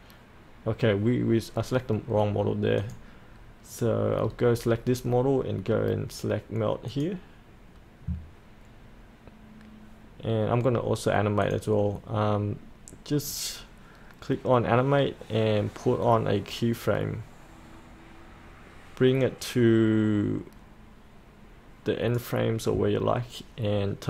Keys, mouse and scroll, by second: 4.2-6.2 scroll down 1, 6.9-24.0 drag.